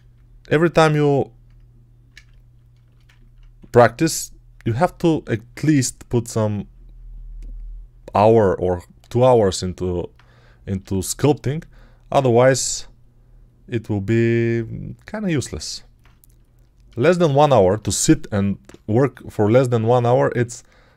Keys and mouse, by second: 3.4 1, 5.4 3, 10.7 g, 20.8 1.